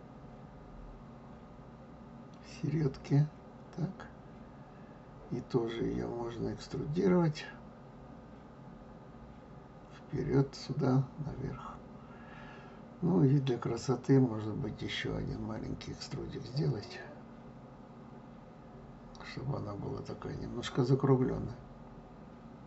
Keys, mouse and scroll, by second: 17.4 scroll up 2, 18.3-21.3 middle drag.